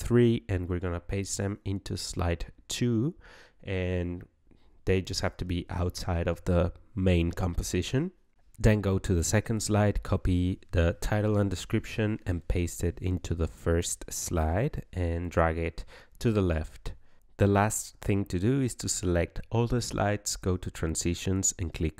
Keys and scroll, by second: 1.5 ctrl+v, 9.8 ctrl+c, 11.4 ctrl+v.